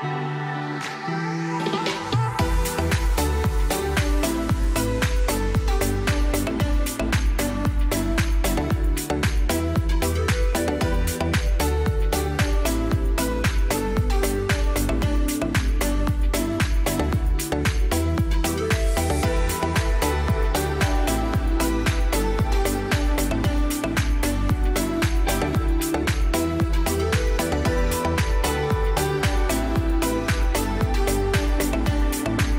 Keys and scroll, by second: 11.3 F2, 13.0 F2, 13.1 Delete, 13.6 F4, 16.4 e, 16.8 shift+F2, 17.9 shift+Page_Up, 18.7 F3, 20.9 shift+Page_Down, 21.5 alt+c, 24.3 F2, 31.6 space, 32.3 shift+F2.